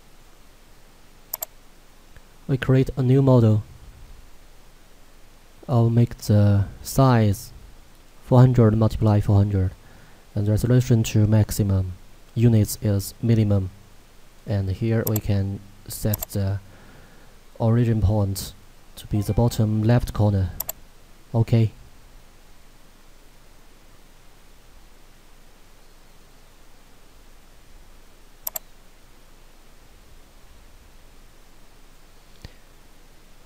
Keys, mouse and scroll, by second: 18.6 click, 20.8 click, 28.5 click.